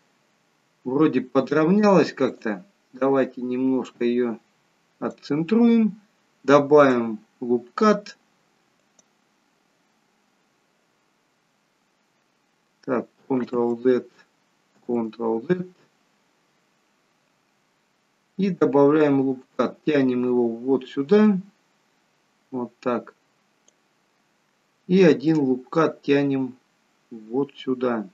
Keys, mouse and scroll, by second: 2.3 click, 3.8 click, 9.8 click, 13.4 ctrl+z, 14.9 ctrl+z, 19.0 click, 25.3 click.